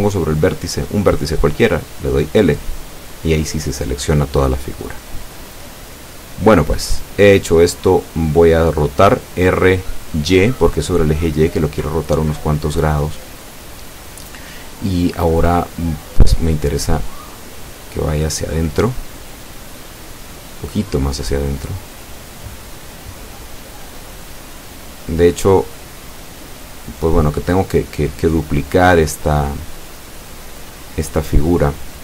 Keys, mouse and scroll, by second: 2.3 l, 4.6 l, 10.3 l, 14.6 r, 15.3 y, 19.9 ctrl+click, 22.5-23.5 middle drag, 24.2-26.6 drag, 26.6-29.0 middle drag, 29.4-30.4 drag, 30.5-32.0 middle drag.